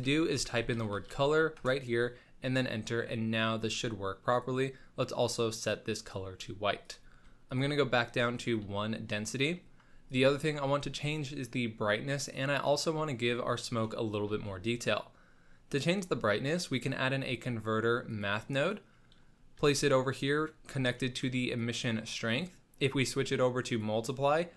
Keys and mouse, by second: 6.8 click, 8.8 middle click, 9.6 middle click, 10.1 click, 14.3 shift+a, 19.1 click, 19.5 g, 21.0 click, 21.6 click, 22.3-23.7 drag.